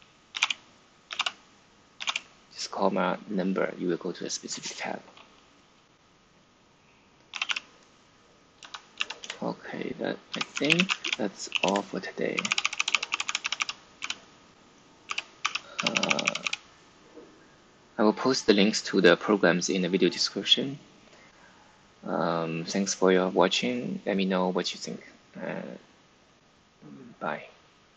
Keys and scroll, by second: 0.0-1.9 typing, 7.0-16.7 typing, 11.6 Return.